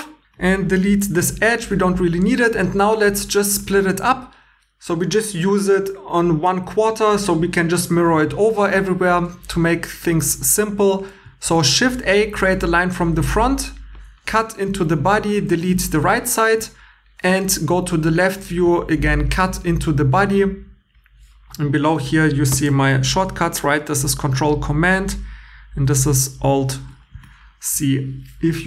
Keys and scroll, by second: 1.2 x, 9.6-13.9 typing, 15.5 x, 18.6 c, 22.9 super+c, 25.8 alt+c.